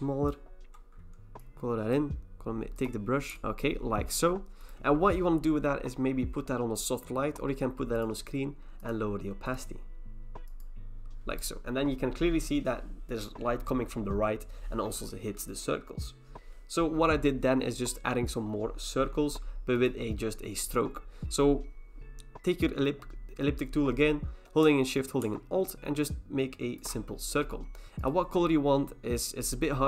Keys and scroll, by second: 3.4 ctrl+z.